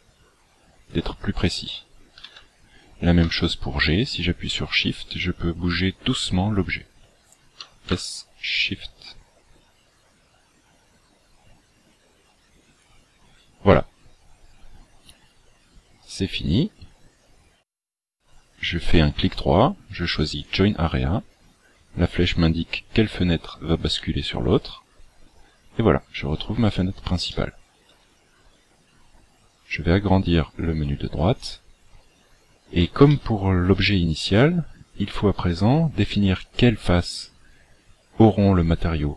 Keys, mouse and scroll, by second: 2.2 g, 7.6 s, 16.0 right click, 25.4-26.0 scroll down 9, 26.6-27.2 scroll up 4, 27.2 shift+middle click, 30.4 click, 32.2-33.0 scroll up 3, 33.0 shift+middle click, 34.0 scroll up 2.